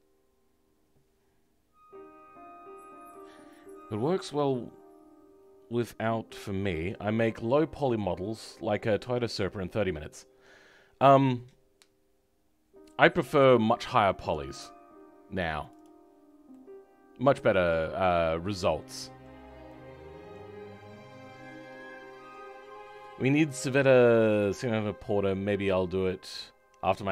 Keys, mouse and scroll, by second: 19.8-27.1 middle drag.